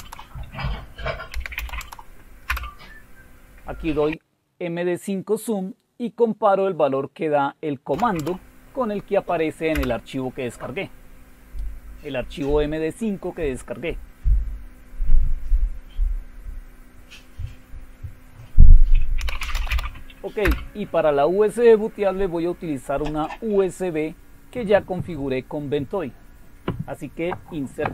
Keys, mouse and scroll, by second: 0.0-2.4 typing, 4.6-8.3 typing, 9.7 typing, 18.9-20.1 typing, 20.4 Return.